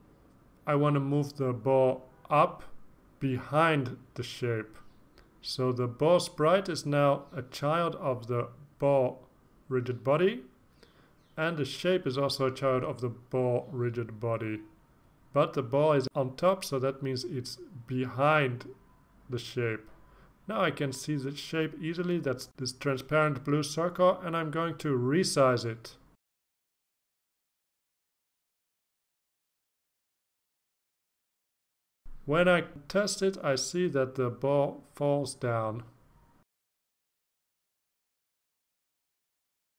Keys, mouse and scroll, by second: 0.8-1.9 ctrl+scroll up 4, 4.0-8.6 drag, 10.3 click, 26.8-29.7 drag, 30.7 click, 33.1 ctrl+s, 34.7 click.